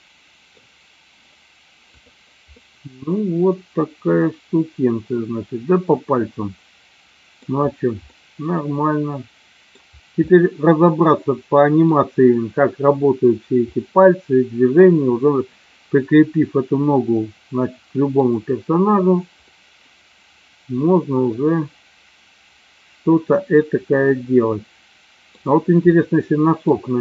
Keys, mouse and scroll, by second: 0.1 middle click, 2.1 click, 2.5-7.4 middle drag, 8.3-9.9 middle drag, 10.3-11.9 middle drag, 13.8-14.8 middle drag, 17.2-18.2 middle drag, 19.5-25.4 middle drag, 25.9 middle click.